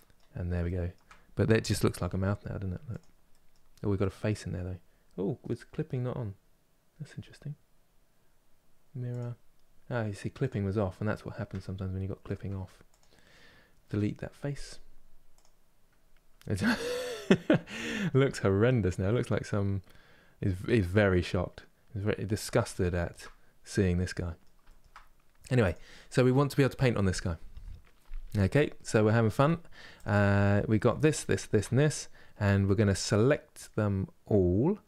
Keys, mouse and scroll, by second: 1.7 e, 3.0-10.2 middle drag, 10.2 click, 10.7 scroll up 1, 11.4-15.7 shift+middle drag, 15.7-16.4 scroll down 1, 16.4-18.0 middle drag, 18.0 Tab, 18.3-18.8 scroll down 1, 18.8 middle click, 19.8-20.5 scroll up 1, 20.5-21.8 scroll up 1, 21.8-22.5 scroll down 1, 22.5-24.7 shift+middle drag, 24.7 scroll up 2, 25.4 click, 28.2-28.6 scroll down 1, 28.6-29.7 middle drag, 29.7 click, 30.0 middle click, 30.7 shift+click, 31.0 shift+click, 34.6 Tab.